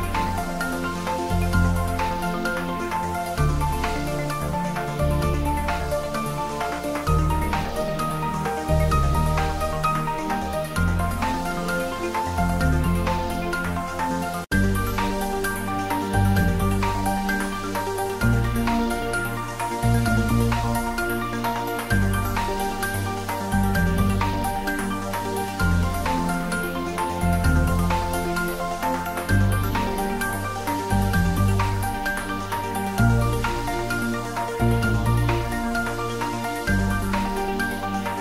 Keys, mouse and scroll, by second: 1.6-2.3 typing, 2.6 click, 2.9 Tab, 3.2-4.8 ctrl+middle drag, 4.8 shift+right click, 5.5 shift+a, 9.2 click, 9.7-10.6 typing, 11.7 click, 12.3 s, 14.7 click, 14.8-16.6 typing, 16.2 click, 18.4 click, 18.8-23.7 typing, 20.2 click, 22.1 click, 23.5 click, 25.1 click, 25.5 ctrl+middle click, 26.4-27.3 typing, 30.8 Return, 31.7 s, 32.9 click, 33.2 s, 34.6 click, 34.6-35.5 typing, 36.1 click, 37.0 s, 37.9 click, 38.0 s.